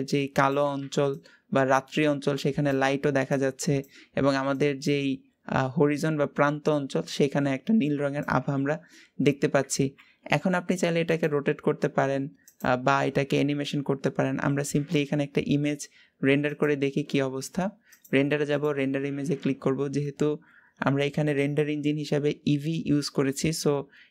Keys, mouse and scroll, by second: 0.3 click, 9.6 r, 12.4 click, 12.9 r.